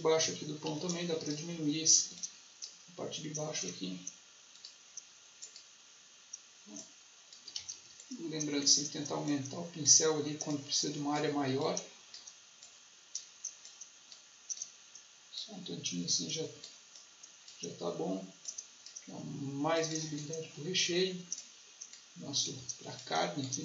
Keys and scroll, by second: 0.7 space, 7.5 ctrl+z, 22.5 ctrl+z.